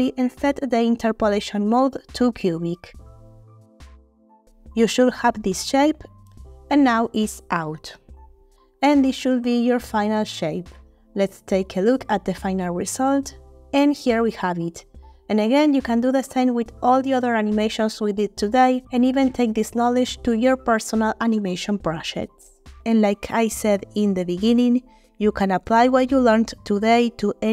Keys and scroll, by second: 15.0 space, 21.3 space.